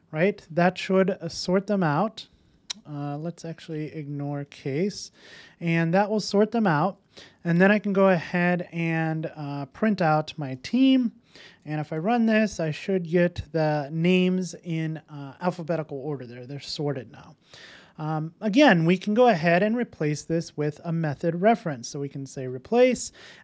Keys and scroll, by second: 4.3 Return, 8.4 Return, 11.3 super+s, 11.9 super+s.